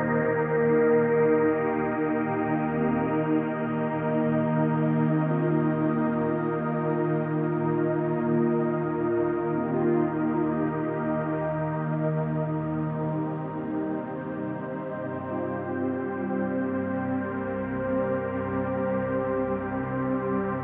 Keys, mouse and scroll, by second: 1.2-2.4 drag, 2.7-4.2 middle drag, 5.3 click, 8.5-9.5 drag, 10.0-10.7 middle drag, 11.3 shift+middle click, 12.1-12.6 scroll down 1, 12.6-13.2 middle drag, 13.5-13.9 shift+middle drag, 14.1-14.5 scroll up 3, 14.9 middle click, 17.1 alt+click, 18.6 middle click, 19.2-19.9 scroll up 2, 20.0 KP_Decimal.